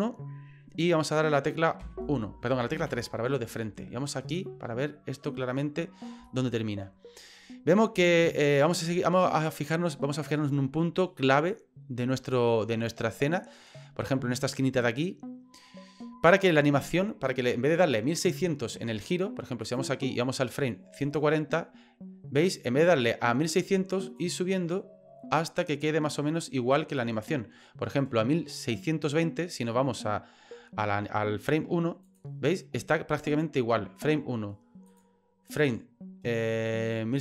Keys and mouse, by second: 1.8 KP_1, 2.7 KP_3, 4.4 shift+middle click, 6.4 shift+middle click, 19.6 right click, 21.0 click, 24.2-27.2 drag, 32.0 click, 34.9 click.